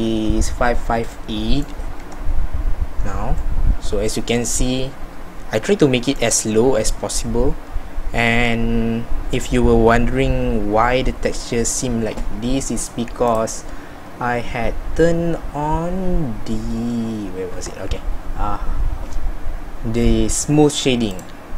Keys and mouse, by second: 2.0 Tab, 17.6 Tab.